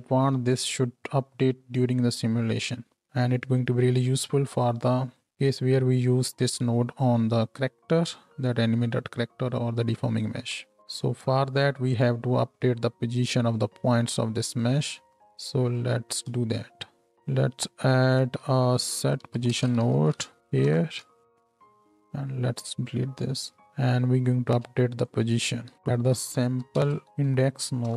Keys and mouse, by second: 0.2-10.8 middle drag, 10.8 Tab, 10.8-15.1 drag, 15.1-18.1 middle drag, 17.0 g, 18.1-20.4 shift+drag, 18.4 shift+a, 20.4 middle click, 21.0-23.5 drag, 21.0 right click, 23.0 ctrl+x, 25.7 x.